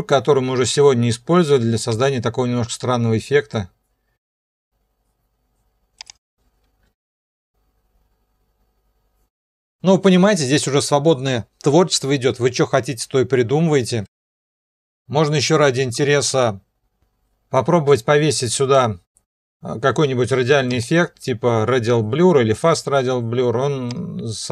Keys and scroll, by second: 6.9 0, 9.4 0, 10.3 0, 14.0 0.